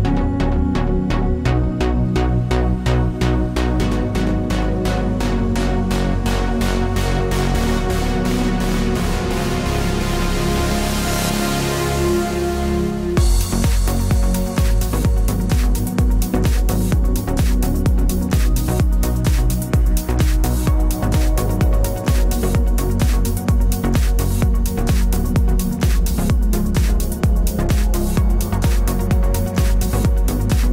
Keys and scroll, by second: 3.1 Return, 12.2 Return.